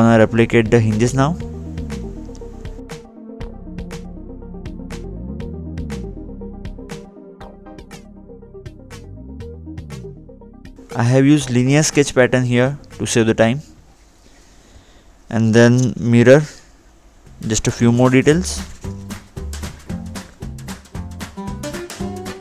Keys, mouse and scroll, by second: 0.0 ctrl+8, 0.6-1.0 scroll down 2, 2.6 click, 3.5 Delete, 4.2 click, 4.7 scroll down 2, 5.0 scroll up 2, 5.3 scroll down 2, 5.9 scroll up 2, 6.1 scroll down 2, 6.5 scroll up 2, 7.0 scroll down 2, 7.9 scroll up 2, 8.1-8.4 scroll down 2, 10.5 scroll down 2, 11.5 scroll up 2, 12.1 scroll up 1, 12.3 scroll down 2, 12.7 scroll up 2, 12.8 scroll down 2, 13.6-14.0 scroll down 1, 14.0-14.5 scroll up 1, 20.0-20.4 scroll up 2, 20.5 scroll down 2, 20.8 scroll up 1, 21.0 scroll down 1.